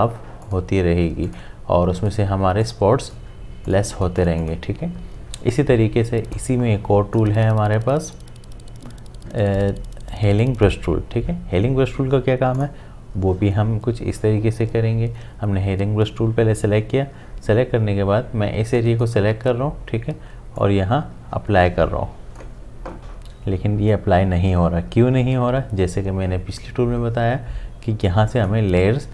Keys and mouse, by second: 12.6 click, 18.8-24.7 drag, 28.3 click.